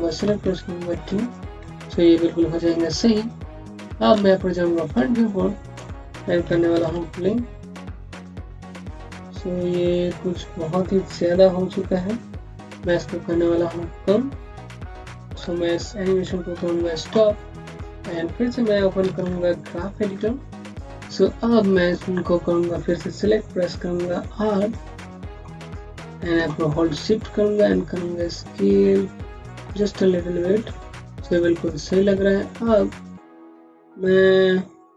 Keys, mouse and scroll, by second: 0.1 typing, 1.1 click, 1.4-3.4 scroll down 1, 3.4 click, 4.0 space, 4.2 click, 4.5 space, 5.2 scroll down 1, 5.7 alt+middle click, 6.6 v, 16.5 v, 17.2 scroll down 1, 17.7 alt+middle click, 19.9 alt+shift+6, 20.6-21.0 scroll down 1, 21.1 click, 22.1-24.3 scroll up 1, 24.6-26.3 scroll up 1, 26.3 r, 27.4 shift+middle click, 27.7 Home, 29.7-31.0 scroll down 1, 31.0 click, 31.6 scroll down 1.